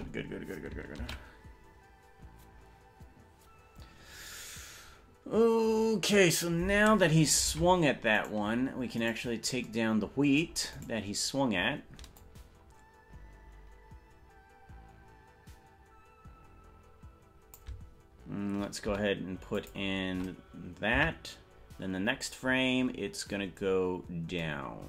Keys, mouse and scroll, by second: 0.1 space, 4.5 ctrl+s, 7.7 ctrl+Tab, 8.5 right click, 9.3 right click, 11.1 right click, 12.3-17.8 drag, 20.5 i, 21.1 Right, 23.7-24.3 scroll down 6, 24.1 scroll up 1.